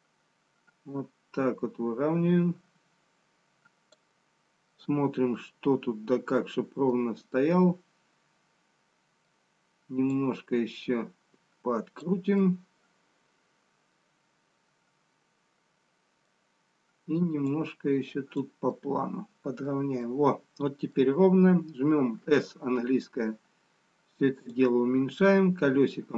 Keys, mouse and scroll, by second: 4.8 middle click, 7.4 middle click, 11.7 click, 12.5 middle click, 18.0 click, 18.7 middle click, 20.0 middle click, 22.8 s, 25.8-26.1 scroll up 6.